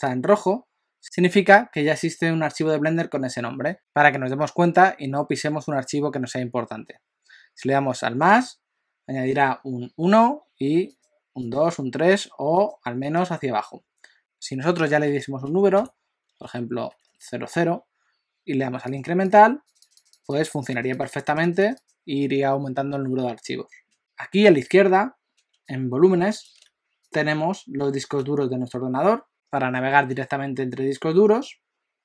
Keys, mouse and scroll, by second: 8.3 click, 10.9 click, 11.4 click, 12.6 click, 13.1 click, 14.2 click, 17.1 0, 19.3-20.3 click, 19.7 click, 19.9 click, 20.6 click, 20.7-21.8 click, 20.9 click, 21.1 click, 21.5 click, 21.6 click, 27.1 click, 29.3 click.